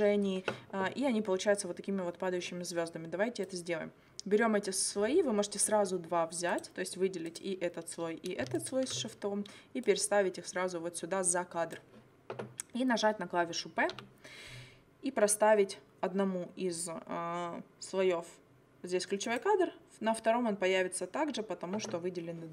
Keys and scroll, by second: 14.0 p.